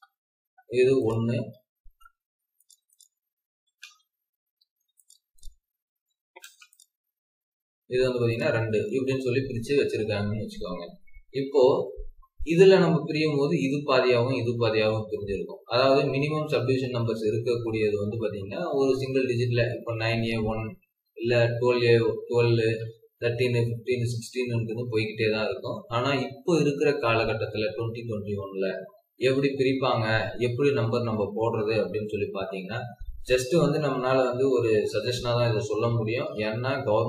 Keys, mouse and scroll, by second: 0.4 scroll up 1, 1.3 scroll down 1, 1.9-2.6 scroll up 1, 2.9 double click, 3.8 typing, 4.4 Escape, 4.7 Escape, 5.3 double click, 5.9-6.3 typing, 7.3 scroll down 1, 7.9 scroll up 1, 8.5 Escape, 8.7 scroll down 1, 10.7-12.5 scroll up 1, 15.5-16.1 scroll down 1, 16.1-19.1 scroll up 1.